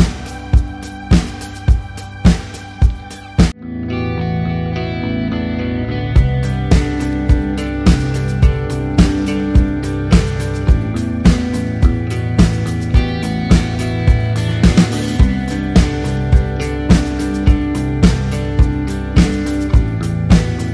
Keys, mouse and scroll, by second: 0.2 click, 3.0 KP_1, 3.4 KP_Enter, 4.2 click, 5.6 click, 7.2 KP_8, 7.5 KP_0, 7.6 KP_Enter, 8.5 click, 9.6 ctrl+click, 10.3 click, 10.8 ctrl+d, 12.6 click.